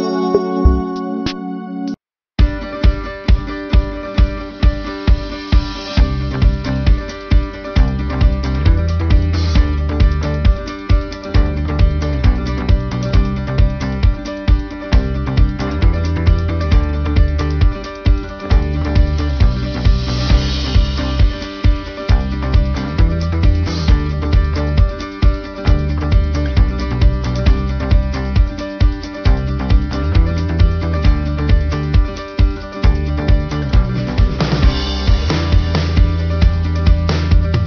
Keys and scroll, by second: 5.1 ctrl+-, 7.9 space, 9.8 ctrl+=, 11.1 space.